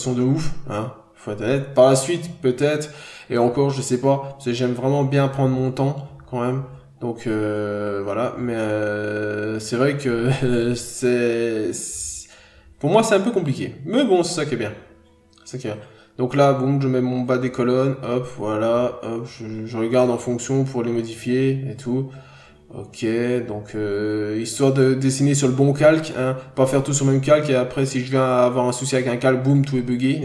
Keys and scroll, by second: 2.6 n, 4.0-4.4 scroll up 1, 5.3 b, 5.9 ctrl+z, 7.3 ctrl+z, 7.7 ctrl+z, 8.6 ctrl+z, 9.5 scroll down 1, 9.6 ctrl+z, 10.1-10.5 scroll up 2, 10.2 ctrl+z, 10.7 b, 11.5 ctrl+z, 13.4 scroll down 1, 13.6 n, 13.7 scroll up 1, 14.0 b, 14.5 ctrl+z, 15.4-15.9 scroll down 1, 20.3-20.6 scroll up 1, 20.6 ctrl+z, 21.3 ctrl+z, 22.3 ctrl+z, 23.6 ctrl+z, 25.8 ctrl+z, 27.4 ctrl+z.